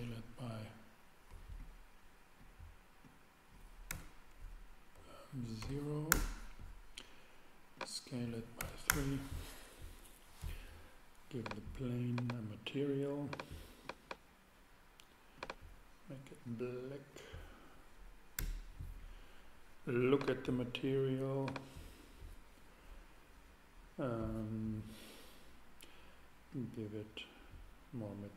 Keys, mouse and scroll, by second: 0.2 s, 3.9 3, 4.9 BackSpace, 5.6 0, 6.1 Return, 7.8-9.5 drag, 8.6 3, 8.9 Return, 11.4-15.1 drag, 15.4-17.1 drag, 18.4 Return, 26.5-28.3 drag.